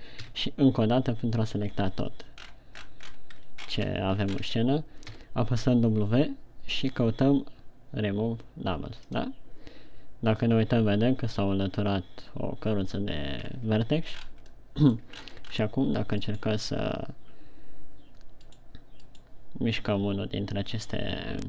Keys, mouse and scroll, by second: 0.3 a, 0.8 a, 2.8-4.3 scroll up 15, 5.7 w, 14.0 scroll down 2, 14.7-15.1 scroll up 4, 15.2 middle click, 16.1-16.9 shift+scroll up 4, 17.3 right click, 19.7 right click.